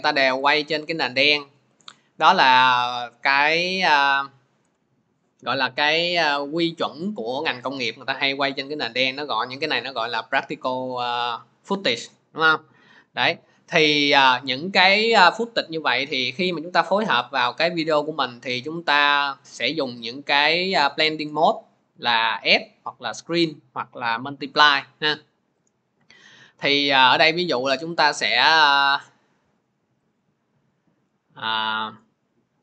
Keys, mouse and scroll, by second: 0.3 click, 3.9 click, 12.1 click, 13.1 click, 20.9 click, 25.5 click, 26.7 click, 26.9 click, 30.0 click, 31.4-31.9 scroll.